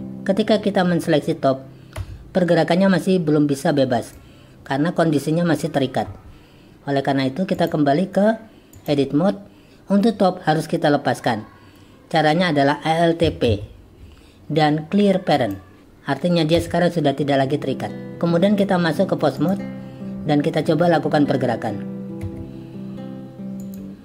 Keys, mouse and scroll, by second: 2.0 g, 7.7-8.9 drag, 13.5 alt+p, 16.6 g, 18.4-19.5 drag, 22.2 g.